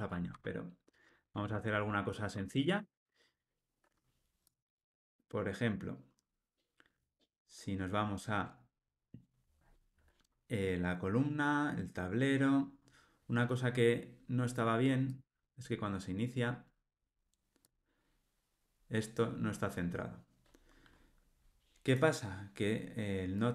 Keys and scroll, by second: 15.2 ctrl+r.